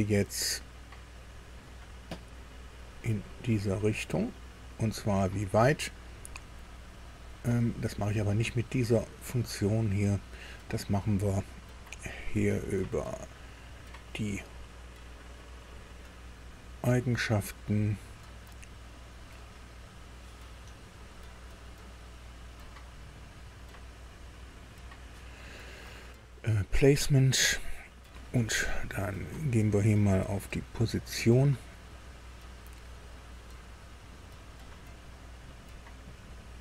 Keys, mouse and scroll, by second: 1.2 click, 2.8-7.9 drag, 9.9 click, 12.7 click, 15.7 click, 16.4 click, 17.6 click, 18.5-18.8 scroll down 1, 21.7 click, 23.1 click, 24.0 click, 27.3 click, 30.6 click, 33.0 click, 33.6 scroll up 2, 34.6-35.1 scroll down 2, 35.3-35.7 scroll up 2, 36.0-36.4 scroll up 2, 36.5-36.6 scroll down 2.